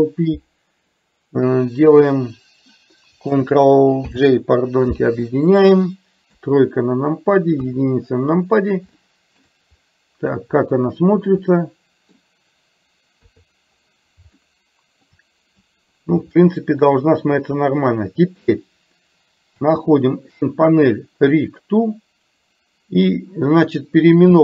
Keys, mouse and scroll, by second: 4.2 ctrl+j, 6.4 KP_3, 7.7 KP_1, 9.0-9.5 shift+middle drag, 9.8 middle click, 11.7 middle click, 13.3 KP_3, 14.4-15.2 shift+middle drag, 16.4-16.9 shift+middle drag, 19.7 n.